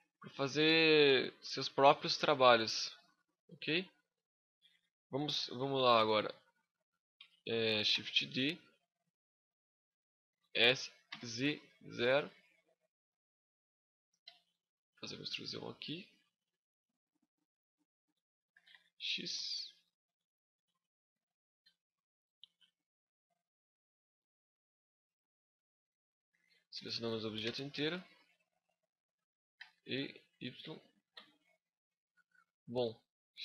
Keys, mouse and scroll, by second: 7.7 shift+d, 8.0 right click, 8.8 click, 9.9 s, 11.8 click, 14.0 e, 14.2 right click, 14.4 click, 16.7 middle click, 18.3 s, 19.6 click, 20.3 s, 21.1 click, 21.4 e, 21.6 right click, 22.0 click, 23.6 click, 24.7 middle click, 27.2 l, 29.8 right click, 30.1 click, 30.9 Tab, 31.2-31.7 scroll down 8, 31.8 middle click.